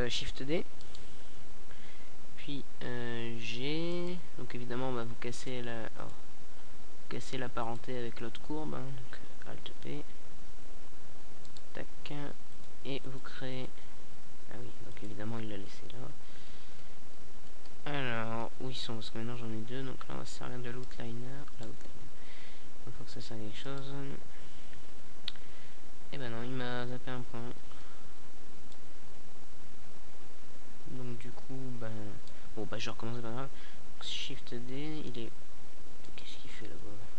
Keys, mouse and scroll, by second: 1.0 alt+p, 3.8 right click, 6.7-9.4 middle drag, 11.0-12.0 middle drag, 12.0-13.6 drag, 13.6-14.8 middle drag, 14.8-16.6 drag, 16.6 middle click, 19.8-20.7 drag, 21.0-21.6 middle drag, 24.9 shift+d, 27.8-28.4 drag, 29.0 middle click, 29.8 KP_7, 30.9-32.7 middle drag, 33.0 g, 35.4-36.1 drag, 36.5 right click.